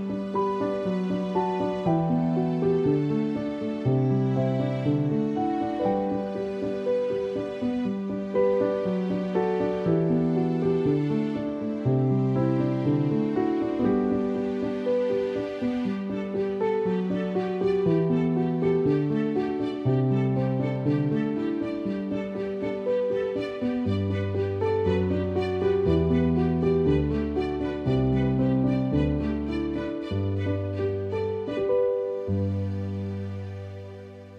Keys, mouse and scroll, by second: 0.1 click, 1.2 F7, 2.0 click, 2.7-5.5 typing, 6.9-9.1 typing, 8.8 click, 9.8 click, 11.4 space, 11.5 click, 11.7 space, 24.5 ], 27.2 click, 29.6 space, 29.7 click, 29.9 space, 33.7 space, 33.8 click, 34.0 space.